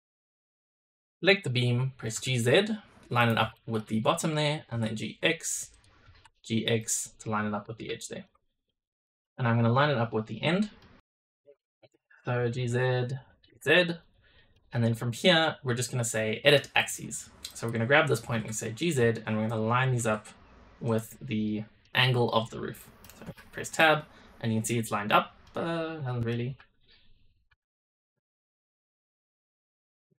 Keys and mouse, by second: 1.9 g, 3.4 shift+middle click, 3.9-4.2 middle drag, 4.5 g, 5.9 g, 7.9 shift+middle drag, 8.3 middle drag, 9.0 g, 10.7 click, 11.6 shift+drag, 12.3 g, 13.3 g, 14.2 click, 16.7 click, 17.4 click, 18.1 g, 19.4 click, 19.8 g, 21.4 middle click, 22.3 middle click, 23.2 Tab, 23.7-24.6 middle drag, 25.4-26.2 middle drag, 26.4 Tab, 27.4 Tab, 28.2 click, 29.0 Tab.